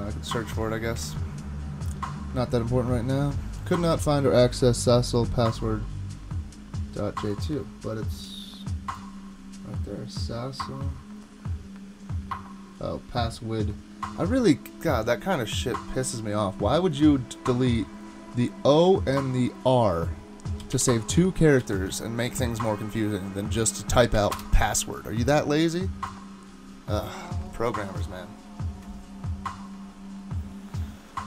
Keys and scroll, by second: 1.0 super+Tab, 20.3-21.2 typing, 21.6 super+s, 24.3 Return.